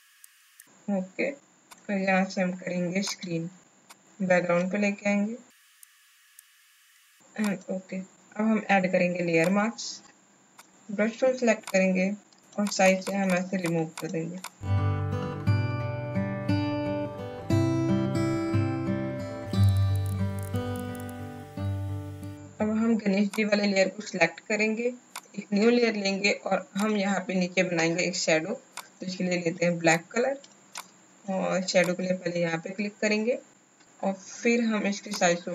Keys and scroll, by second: 14.3 space, 14.8 space, 16.4 space, 16.5 space, 19.4 alt+b, 20.3 ctrl+z, 20.5 space, 20.7 x, 21.1 space, 30.6 alt+space.